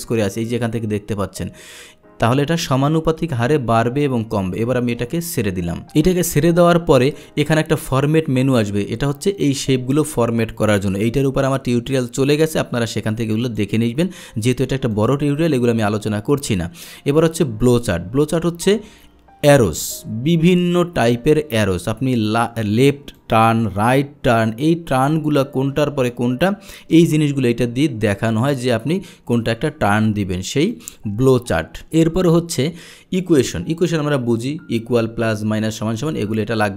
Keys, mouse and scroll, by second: 13.5 click, 14.9 click, 22.3 click, 23.2-29.5 drag, 30.7 click, 31.9 click.